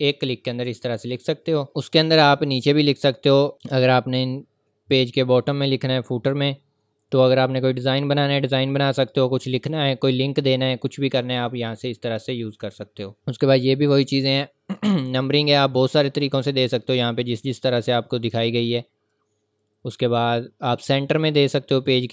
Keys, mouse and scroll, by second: 1.7 click, 3.5 scroll down 1, 3.7-6.6 scroll up 1, 7.5 scroll up 1, 9.5 click, 10.5 scroll up 1, 12.6 click, 15.8-18.0 scroll down 1, 18.5-19.0 scroll up 1, 21.9-22.1 scroll down 1.